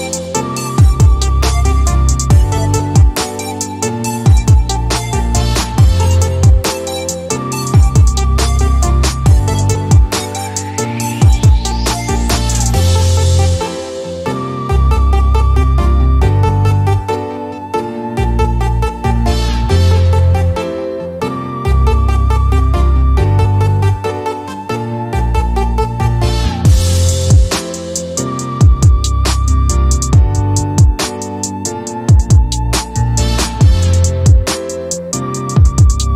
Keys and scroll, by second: 1.9 c, 5.7 Escape, 7.9 p, 15.4 c, 23.5-25.7 typing, 27.9-29.0 typing, 32.2 e.